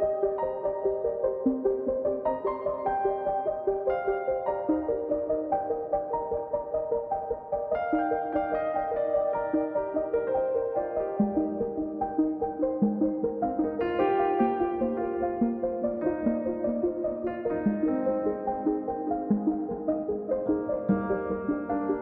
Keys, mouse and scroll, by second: 0.0-1.6 middle drag, 1.9-9.8 drag, 12.6-20.4 drag, 20.4 scroll up 1, 21.1 click.